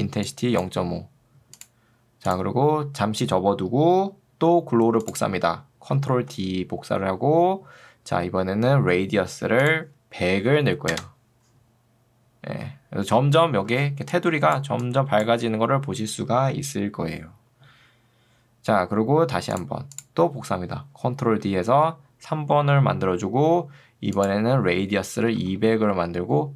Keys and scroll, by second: 0.7 Escape, 6.3 ctrl+d, 10.5 0, 10.9 Return, 13.7 ctrl+2, 15.9 ctrl+Escape, 21.1 ctrl+d, 25.9 Tab.